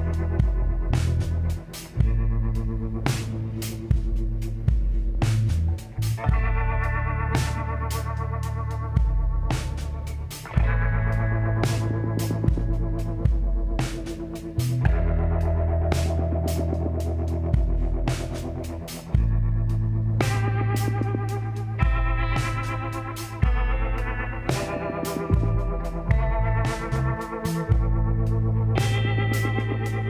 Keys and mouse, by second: 0.9 KP_1, 2.0 Tab, 2.9-5.4 drag, 3.3 z, 4.1 b, 6.2 g, 7.8 r, 10.1-11.9 drag, 12.3 t, 12.6-15.3 drag, 14.3 r, 19.5-21.1 drag, 22.7 r, 24.2 g, 27.5 z.